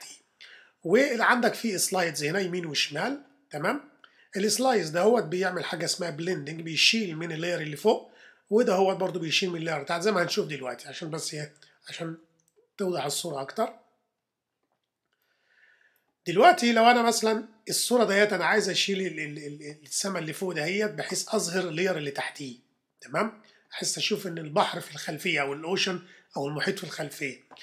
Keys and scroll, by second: 11.3 super++, 12.2 super+-.